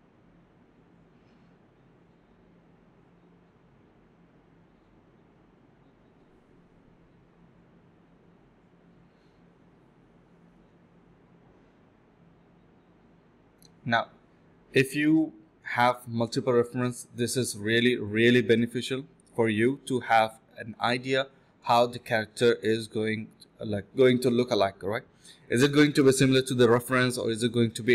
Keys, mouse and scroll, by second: 1.4-2.5 typing, 3.8 alt+click, 4.3 alt+click, 4.5-6.5 typing, 7.8 scroll down 1, 7.9 middle click, 8.6 scroll up 1, 8.7 middle click, 8.9-9.3 scroll down 2, 9.0 middle click, 9.3 middle click, 9.5-10.8 scroll up 3, 9.9 middle click, 10.3 middle click, 10.9 double click, 12.0-12.8 typing, 12.5 ctrl+b, 13.3 double click, 15.1-15.9 typing, 15.7 double click, 16.1 double click, 18.4 typing, 21.2 alt+click, 22.0 typing, 23.2 double click, 24.2 typing, 26.9 typing, 27.4 alt+click.